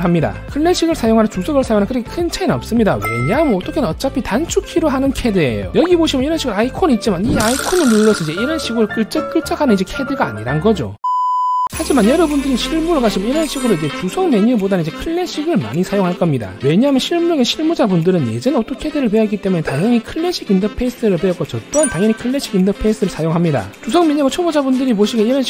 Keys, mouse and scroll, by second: 7.9 click, 8.4 click, 8.8 click, 9.0 click, 9.3 click, 9.5 right click.